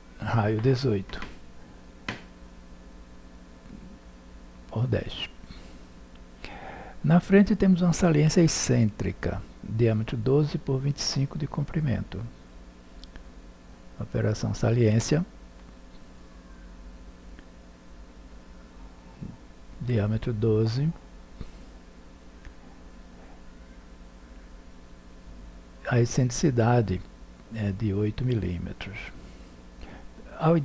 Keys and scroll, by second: 2.3 1, 3.1 0, 19.2 1, 19.4 2, 21.8 2, 22.7 Return.